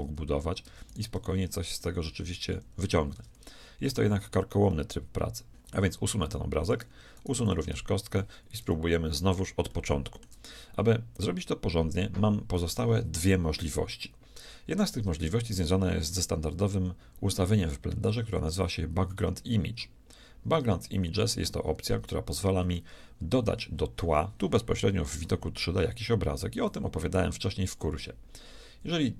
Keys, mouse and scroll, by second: 0.0 Tab, 0.7 Tab, 1.4-2.6 drag, 1.8 g, 3.2 Tab, 4.8 middle click, 5.6 click, 5.6-9.1 right drag, 6.3 x, 7.5 x, 8.7 KP_1, 18.6-20.6 drag, 22.3 Tab, 26.7-28.7 drag.